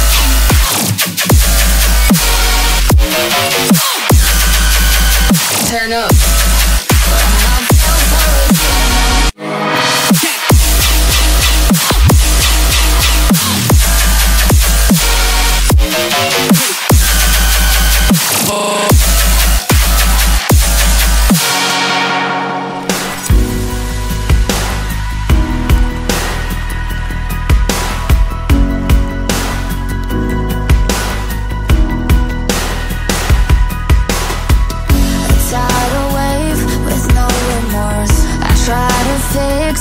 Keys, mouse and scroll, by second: 0.6 shift+click, 1.2 shift+click, 2.1 shift+scroll down 1, 2.8 scroll down 1, 3.4 scroll up 1, 4.0 scroll up 2, 13.5 shift+click, 14.8 shift+click, 15.4 shift+click, 16.9 shift+click, 17.5 shift+click, 18.7 shift+click, 19.1 shift+double click, 19.7 shift+click, 20.2 shift+click, 21.6 shift+click, 22.9 middle click, 28.9 shift+click, 30.0 shift+click, 30.6 shift+click, 31.9 shift+click, 35.9 scroll up 4, 36.9 shift+click, 37.4 shift+double click, 38.1 shift+click, 38.5 shift+click, 39.7 shift+click.